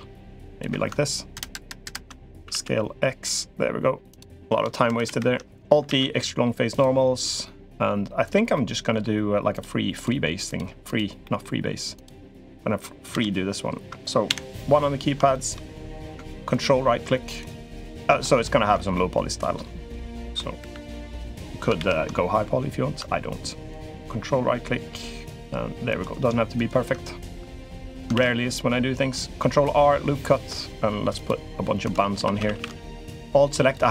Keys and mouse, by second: 1.3 ctrl+KP_Add, 1.7 ctrl+KP_Add, 2.2 s, 4.6 ctrl+KP_Subtract, 4.8 ctrl+KP_Subtract, 5.6 alt+e, 8.3 middle click, 9.3 click, 9.8 click, 10.3 click, 10.6 click, 11.0 middle click, 11.7 click, 12.9 KP_3, 14.0 KP_1, 15.1 shift+click, 15.3 shift+middle click, 16.3 ctrl+right click, 17.8 ctrl+right click, 18.2 shift+middle click, 18.7 middle click, 19.6 click, 20.4 ctrl+KP_3, 21.5 ctrl+KP_1, 25.6 ctrl+right click, 27.1 middle click, 27.9 ctrl+r, 32.0 3, 32.2 a, 32.3 a, 32.7 alt+shift+click, 33.4 alt+shift+click.